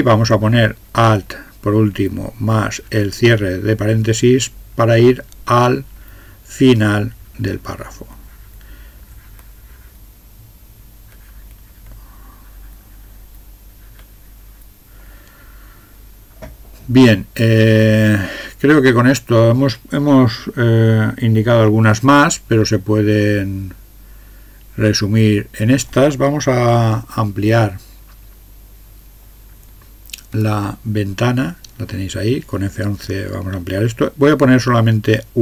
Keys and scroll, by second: 30.4 F11.